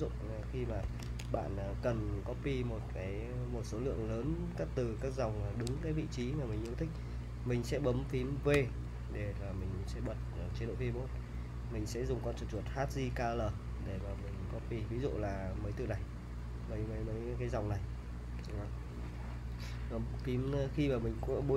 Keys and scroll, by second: 0.0-1.7 typing, 5.6 super+Tab, 8.5 shift+v, 14.1-14.6 typing, 17.0 k, 18.4 j.